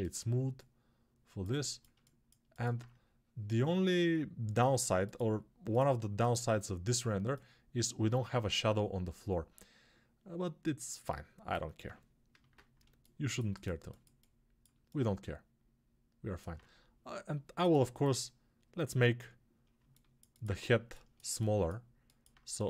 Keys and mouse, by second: 12.2 ctrl+space, 19.7-22.6 alt+shift+drag.